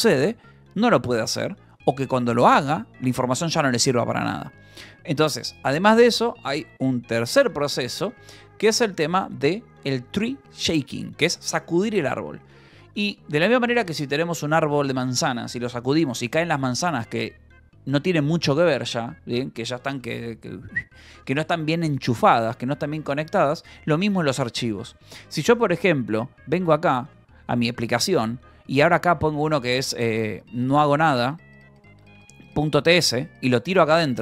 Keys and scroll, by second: 25.4 j, 26.6 k, 27.3 j, 27.9 j, 28.5 a, 29.8-34.2 typing.